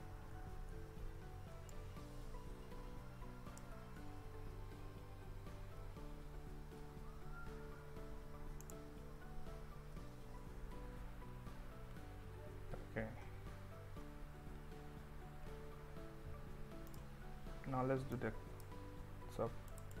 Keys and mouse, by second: 0.7 Escape, 1.8-3.6 shift+drag, 4.2 s, 5.9 click, 6.9 Tab, 8.7 click, 10.5 Tab, 10.9 q, 14.5 Tab, 18.2 click.